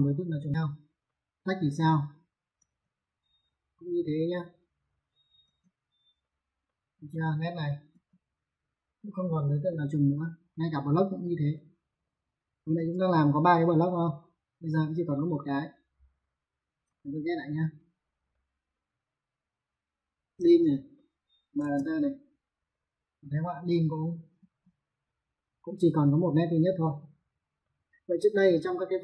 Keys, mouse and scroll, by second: 0.9 middle click, 2.0 click, 2.4 space, 2.7 click, 5.0 click, 5.3 space, 5.5 click, 6.5 middle click, 7.4 click, 7.9 click, 9.0 middle click, 10.4 middle click, 11.9 click, 12.6 space, 12.9 click, 15.2 click, 16.9 ctrl+z, 18.2 middle click, 20.3 click, 20.8 middle click, 21.4 m, 21.4 space, 22.1 click, 24.0 click, 24.2 space, 24.7 click, 27.5 middle click.